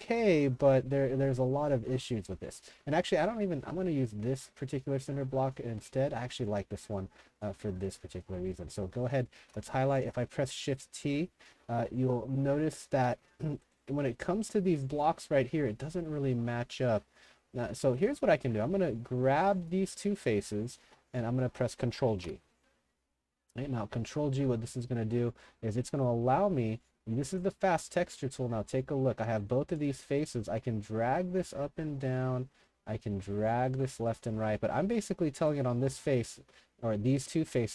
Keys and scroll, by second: 9.4 shift+t, 12.8-13.9 typing, 16.8-19.0 typing, 20.8 s, 21.1 w, 22.2 ctrl+g.